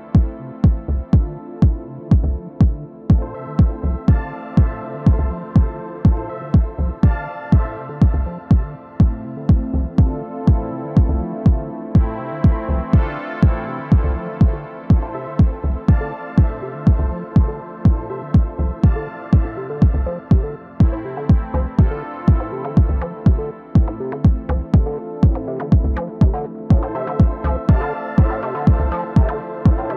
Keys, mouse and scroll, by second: 3.5-4.9 middle drag, 4.6 alt+w, 6.1-9.0 drag, 8.5-10.3 middle drag, 9.3 f, 10.4-19.2 drag, 10.8 m, 18.3-19.7 middle drag, 19.7-21.6 drag, 21.9 shift+f, 22.6-26.2 drag, 25.5-27.2 middle drag, 28.2 ctrl+i, 29.2-29.9 middle drag.